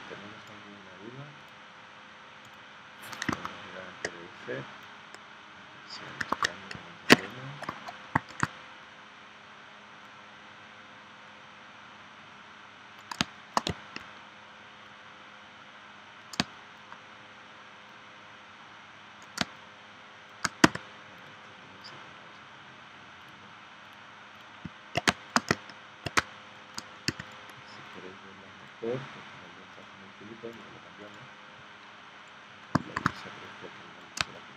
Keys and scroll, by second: 3.3 super+Tab, 6.3 super+Tab, 8.3 shift+c, 13.2 space, 16.4 space, 19.4 space, 20.6 v, 25.0 space, 26.2 space, 27.1 v, 33.0 shift+c, 34.2 space.